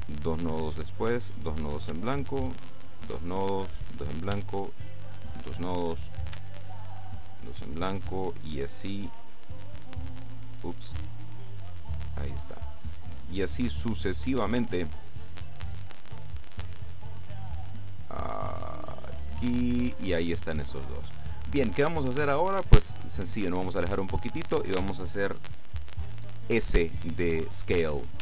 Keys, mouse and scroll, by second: 2.3 shift+right click, 3.0 right click, 4.8 shift+right click, 5.6 right click, 6.8 shift+right click, 7.4 right click, 9.3 right click, 10.0 right click, 11.2 right click, 12.6 right click, 14.1 right click, 15.3 right click, 18.5 right click, 19.3 right click, 22.7-23.3 scroll down 2, 23.3-23.9 scroll down 1, 24.4-24.9 scroll down 2.